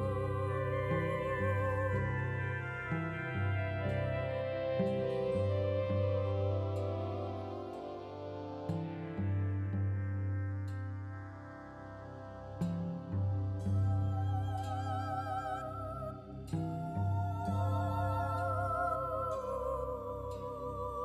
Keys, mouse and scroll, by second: 0.0 click, 0.5 ctrl+s, 0.9 click, 3.1 click, 5.1 click, 5.8 click, 7.9 click, 9.5 click, 11.2 click, 12.8 middle click, 13.7 click, 14.1 middle click, 14.9 click, 16.5 click, 18.5 click, 19.7 middle click.